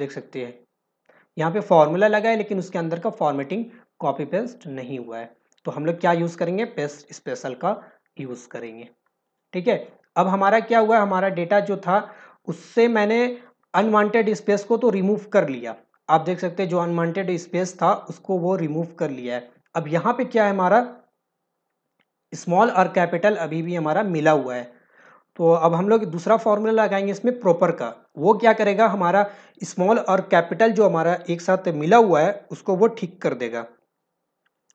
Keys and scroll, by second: 15.0 ctrl+alt+v.